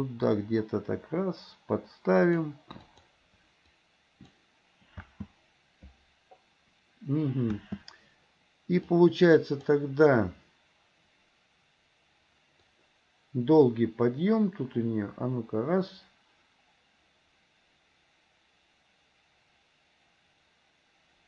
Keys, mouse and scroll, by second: 3.1 click, 4.0 click, 5.2 space, 8.9-9.8 drag, 12.9-21.2 drag.